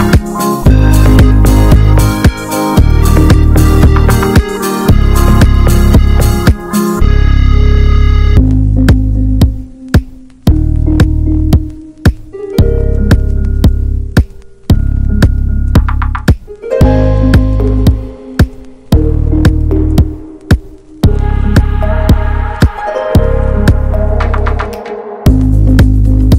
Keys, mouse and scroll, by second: 0.4 scroll down 1, 0.5 alt+z, 1.2 middle click, 1.6-2.1 scroll down 1, 4.8 b, 8.2 alt+middle click, 9.0 alt+z, 9.4-10.4 scroll up 1, 10.8 alt+middle click, 11.8-13.3 alt+middle drag, 19.3-21.8 drag.